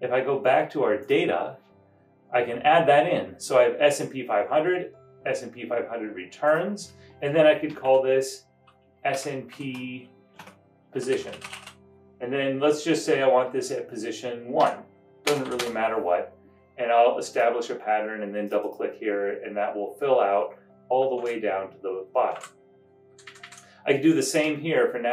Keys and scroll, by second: 8.0 Return, 9.5-12.4 typing, 14.5-15.4 typing, 15.6 Return, 21.3 super+Down, 22.5 super+Up, 23.3 Right, 23.3 Right, 23.4 Right.